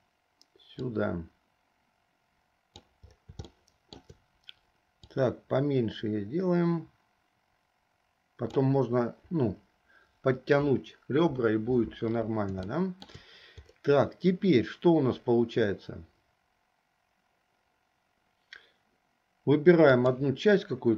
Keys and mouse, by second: 1.1-2.9 drag, 3.7 shift+middle click, 5.3-8.6 drag, 12.8 shift+middle click.